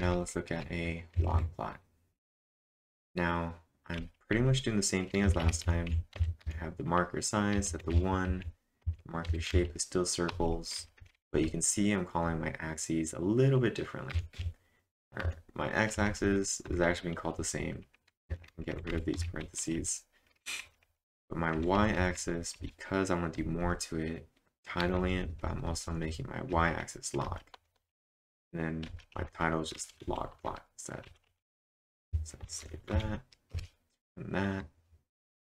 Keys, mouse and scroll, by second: 0.0-0.2 typing, 5.0-6.4 typing, 10.1-12.4 typing, 13.9-14.8 typing, 21.3-26.5 typing, 29.7-31.8 typing, 32.5 ctrl+`, 32.9 Up, 33.5 Return.